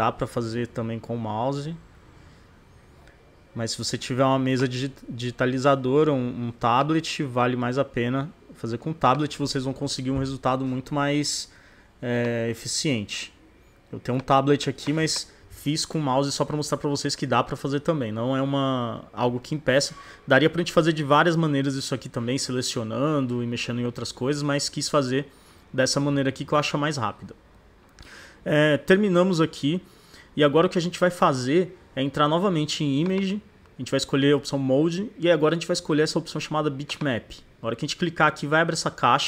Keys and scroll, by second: 4.8 [, 11.1 ].